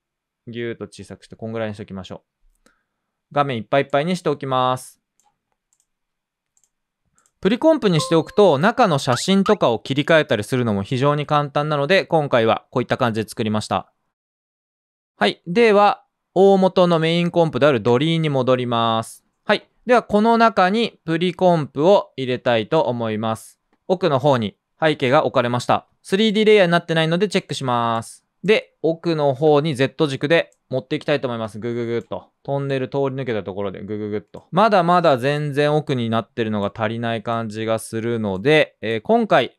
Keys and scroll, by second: 9.0 typing, 12.2-12.9 typing, 20.9-21.7 typing, 23.0-23.7 typing, 27.2 typing, 29.3 typing, 36.7 typing, 39.1 typing.